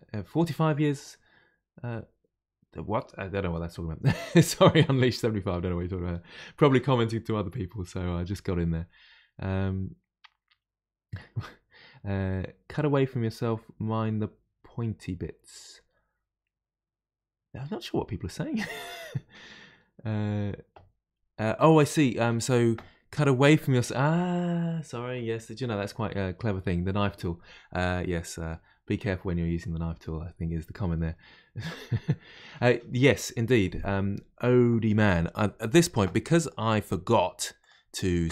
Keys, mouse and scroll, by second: 37.6 click.